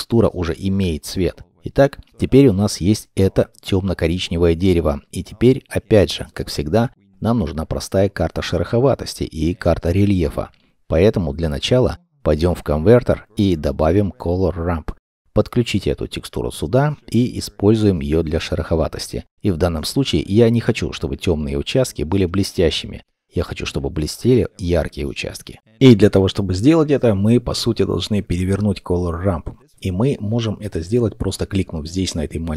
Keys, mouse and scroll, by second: 1.9 middle click, 5.8-6.6 scroll down 1, 6.6 middle click, 7.1-8.1 scroll down 1, 11.2 shift+a, 14.7-17.0 scroll up 1, 17.0 middle click, 24.7 middle click, 26.4-29.5 scroll.